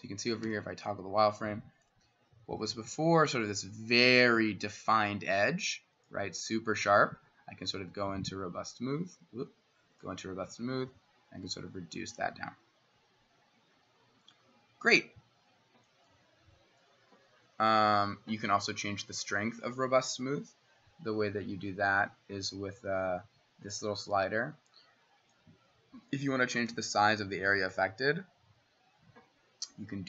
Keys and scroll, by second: 0.5 w, 2.4 ctrl+z, 2.6 ctrl+z, 4.4 s, 20.5-21.4 ], 23.1 [, 25.8 [, 26.3 [, 26.7-27.7 ].